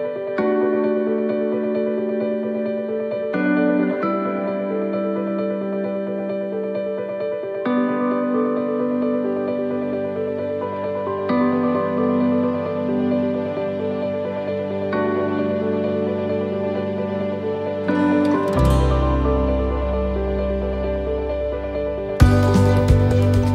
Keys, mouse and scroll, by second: 2.2 click, 6.3 click, 6.3 middle click, 6.8-7.8 scroll down 8, 7.5 middle click, 8.1-8.7 scroll up 2, 9.3 scroll up 1, 9.4 click, 11.5 click, 14.9 click, 14.9 middle click, 17.6-18.0 scroll down 2, 18.0 middle click, 20.0 middle click, 20.1 shift+middle click, 20.2 shift+middle click, 20.7 middle click, 21.2 shift+middle click, 21.7-22.0 scroll up 2, 22.0 middle click, 22.7 shift+middle click, 23.2 middle click.